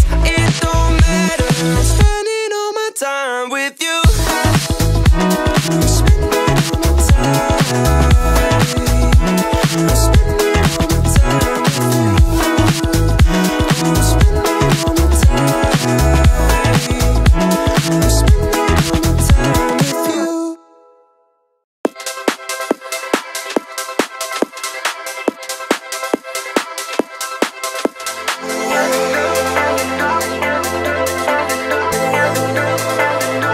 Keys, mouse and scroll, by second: 1.5 KP_1, 1.6 KP_Decimal, 1.9 KP_2, 2.7 click, 3.1-4.2 scroll up 1, 4.4 click, 5.0 alt+click, 5.4 scroll up 1, 6.4 e, 7.7 KP_Decimal, 7.9 KP_0, 8.3 KP_0, 8.3 KP_1, 9.5 click, 11.7 click, 13.8 drag, 15.0 click, 16.1-16.9 scroll up 1, 19.6 click, 20.7 alt+shift+click, 21.7 ctrl+z, 22.2 scroll up 1, 22.5 shift+middle click, 23.2-23.5 scroll up 1, 24.3 alt+shift+click, 25.1 ctrl+z, 25.9 alt+shift+click, 26.6 alt+shift+click, 27.9 ctrl+z, 28.6 alt+shift+click, 29.6 alt+shift+click, 30.3 alt+shift+click, 31.0 alt+shift+click, 31.6 alt+shift+click, 32.3 alt+shift+click, 33.4 alt+shift+click.